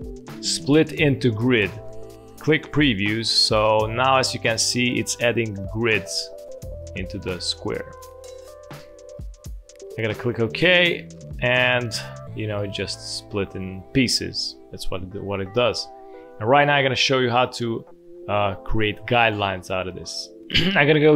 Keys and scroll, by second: 15.5 ctrl+z, 15.7 ctrl+z, 16.1 ctrl+z.